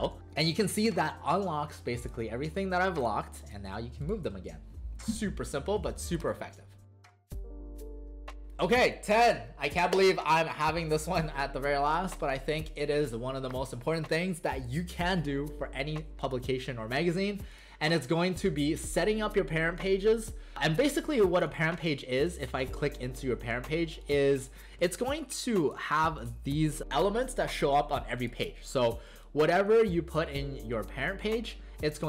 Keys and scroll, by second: 4.2 ctrl+z, 25.4 alt+space, 29.1 alt+space.